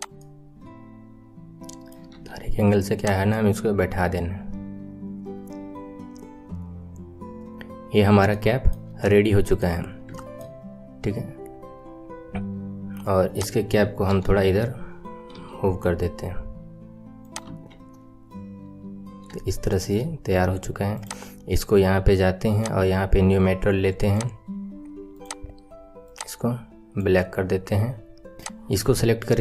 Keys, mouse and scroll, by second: 0.1-0.5 middle drag, 0.5-2.1 right drag, 2.1 KP_3, 2.9 click, 3.2-4.4 right drag, 3.2 middle click, 7.5 click, 7.8-8.2 scroll down 5, 8.3-9.7 right drag, 8.3 shift+middle click, 9.7-10.1 scroll down 3, 10.1-10.9 shift+middle drag, 10.9-11.3 scroll up 4, 11.3-13.3 scroll down 2, 13.3 click, 14.1 KP_7, 15.3 r, 17.4 KP_1, 18.9-19.4 scroll down 2, 19.4-20.9 shift+middle drag, 20.9 click, 22.5 click, 23.9-25.2 drag, 28.3 click.